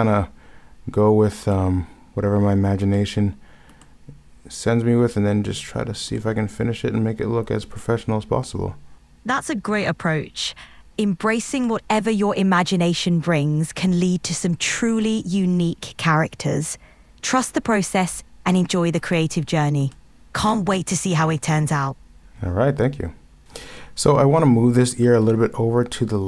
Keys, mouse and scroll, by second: 11.7 ctrl+z, 14.8 ctrl+z, 15.0 ctrl+z, 19.1 ctrl+z, 19.9 ctrl+z, 25.0 ctrl+z.